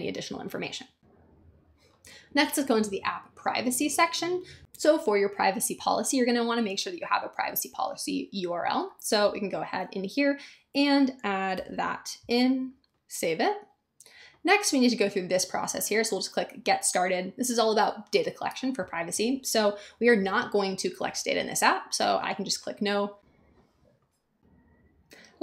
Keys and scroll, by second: 11.5 super+v.